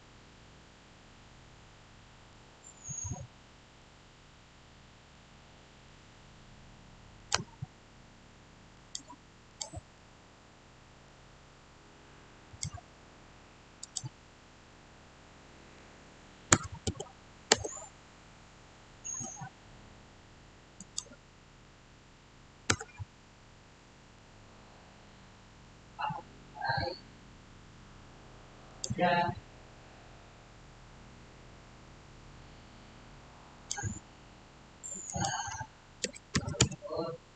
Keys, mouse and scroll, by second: 3.7-4.3 scroll up 1, 5.0 middle click, 5.2 scroll down 1, 7.1 click, 9.8-12.4 middle drag, 12.4 click, 16.4 click, 16.5 typing, 17.4 Return, 18.6-20.7 middle drag, 20.7 click, 22.6 Return, 23.1-23.6 scroll down 1, 23.6 middle click, 24.4 scroll up 1, 24.9-27.7 middle drag, 28.6 click, 33.3 scroll up 1, 33.4 click, 35.7-37.0 typing.